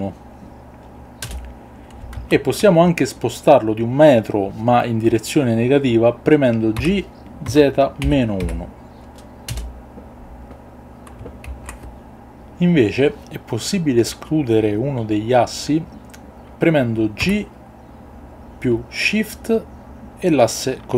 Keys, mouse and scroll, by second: 1.2 Return, 2.2 ctrl+z, 7.4 z, 8.0 KP_Subtract, 8.4 KP_1, 9.5 Return, 11.5 alt+g, 17.2 g.